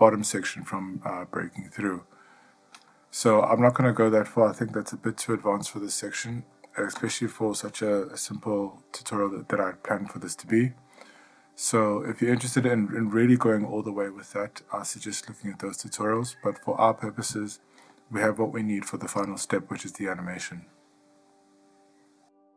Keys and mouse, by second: 11.4-12.3 middle drag.